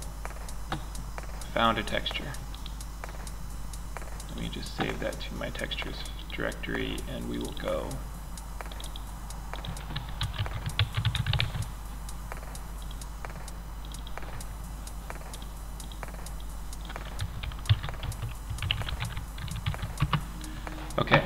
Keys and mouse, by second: 21.2 click.